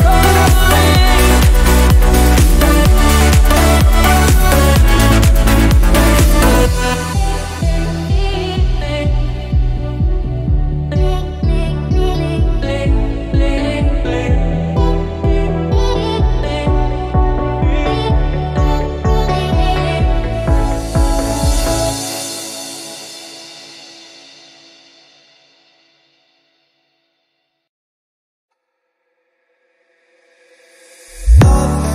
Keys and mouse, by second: 2.4-20.8 drag, 22.6-24.4 drag, 27.6-31.9 drag.